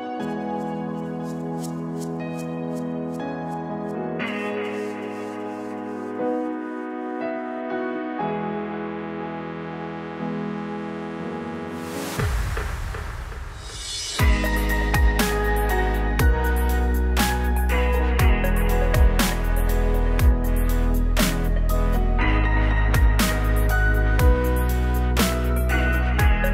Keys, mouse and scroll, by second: 4.8-5.6 drag, 6.4 drag, 7.8-8.1 drag, 8.1 middle drag, 8.2 right click, 8.4 middle click, 8.5-11.6 drag, 8.5 right drag, 12.0-13.5 drag, 13.5 ctrl+z, 14.0 ctrl+z, 14.5 click, 15.3 click, 16.2 click, 17.1 click, 19.1-20.3 drag, 21.5-22.6 drag, 23.2 click, 25.4 click.